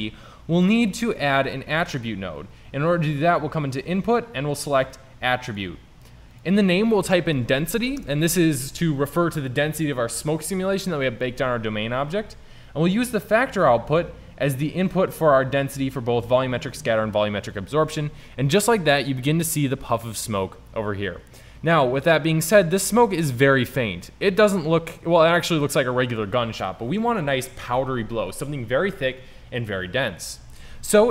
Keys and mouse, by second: 1.5 shift+a, 13.9 click, 14.4 middle click, 16.3 drag, 22.7 middle drag, 25.7 middle click.